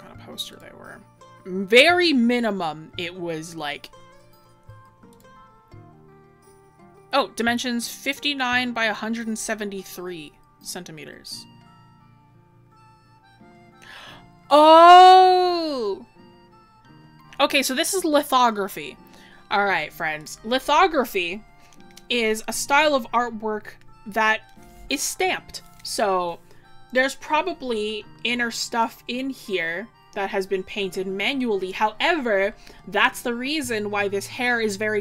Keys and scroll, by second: 28.6 scroll, 30.9-31.6 scroll.